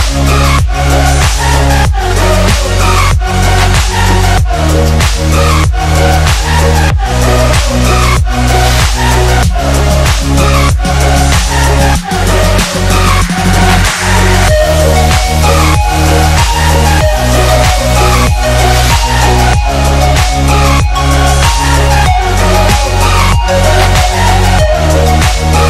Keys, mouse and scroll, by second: 0.0 click, 0.6 click, 4.4 shift+click, 4.5-7.9 alt+drag, 8.3 ctrl+=, 8.9 space, 9.2-9.6 click, 9.6 space, 10.0 ctrl+=, 10.8 space, 10.9 click, 11.2 space, 11.6-15.4 drag, 17.6 ctrl+=, 18.5 space, 18.6 click, 18.8 space, 19.0 click, 20.0 space, 20.5 click, 20.6 space, 20.8-22.6 drag, 23.6 ctrl+=, 24.0 space, 24.0 click, 24.2 space, 24.4 click, 24.6 space, 25.2 click.